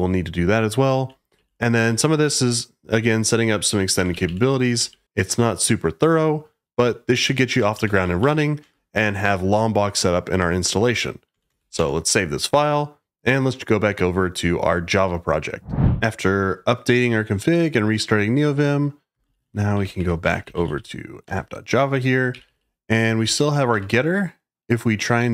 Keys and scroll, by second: 0.0-2.3 typing, 3.8-5.2 typing, 6.7-7.7 typing, 11.1-12.0 typing, 19.0-24.1 typing, 21.2 Return.